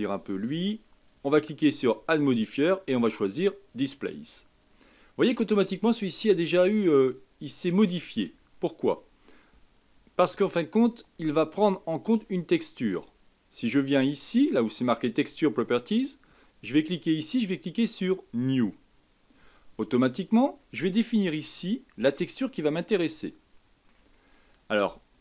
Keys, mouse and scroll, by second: 4.9 middle click, 5.6-6.1 scroll up 3, 6.1-9.1 middle drag, 15.8 click, 17.9-20.3 drag, 20.3-21.0 scroll down 2, 21.5-25.2 middle drag.